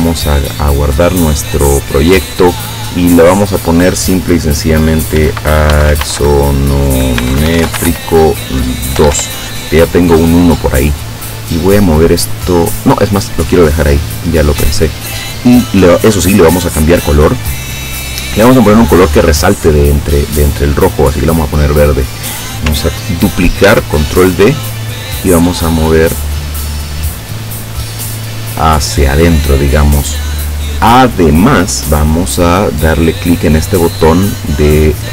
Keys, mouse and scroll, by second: 5.2-9.1 typing, 9.2 Return, 11.9-13.0 drag, 14.0 click, 17.0-20.3 drag, 21.3 click, 23.7 ctrl+d, 25.1-28.5 drag.